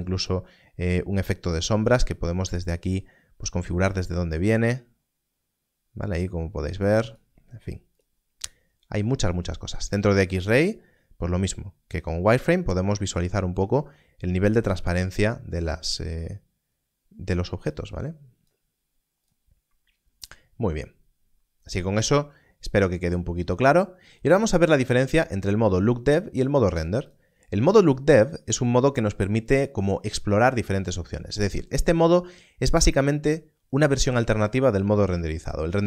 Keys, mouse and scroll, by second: 10.6 click, 32.8 click.